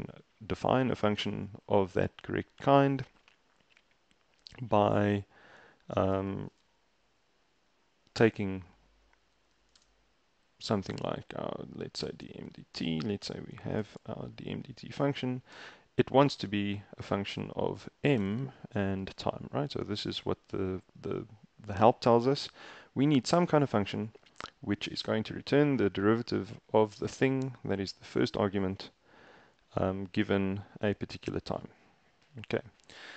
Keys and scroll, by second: 9.2-10.3 typing, 12.0-16.1 typing, 18.2 /, 18.3 space, 19.1 t.